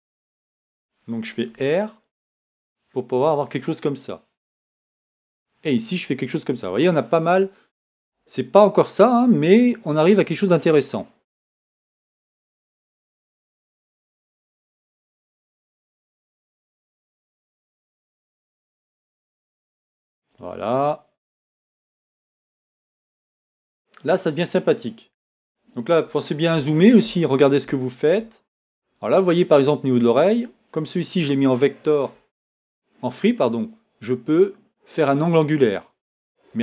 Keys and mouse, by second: 1.6 r, 3.7-5.1 drag, 14.5 right click, 17.2 right click, 28.0-29.5 middle drag.